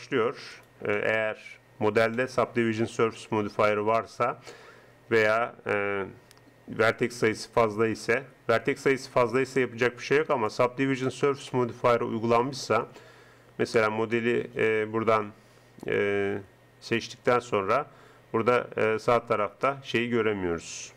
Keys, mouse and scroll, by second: 0.6 right click, 1.2 click, 2.2 right click, 3.3 g, 8.0 g, 14.9 click, 17.1-18.9 middle drag.